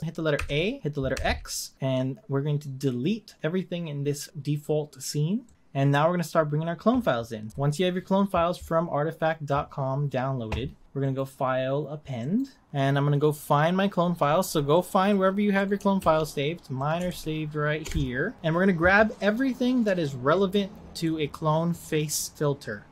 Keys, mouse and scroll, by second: 0.0 click, 0.3 a, 1.1 x, 11.0-13.5 drag.